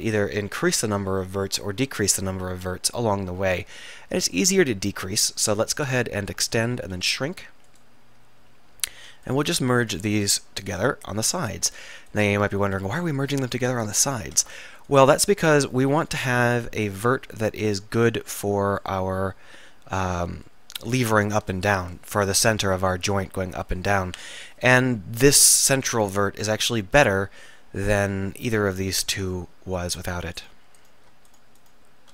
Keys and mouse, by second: 4.4 click, 5.1 middle click, 5.8 click, 6.4 e, 6.9 s, 10.8 alt+m, 13.2 click, 14.3 alt+m, 16.2 alt+m, 20.0-24.7 middle drag, 25.6-26.7 middle drag.